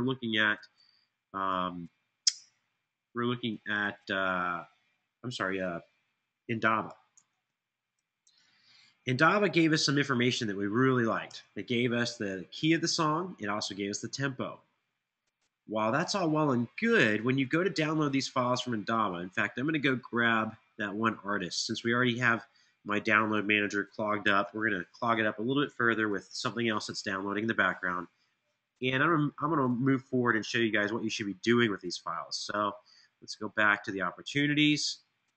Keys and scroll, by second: 7.3-10.0 typing, 11.0 Return, 24.1 alt+super+l.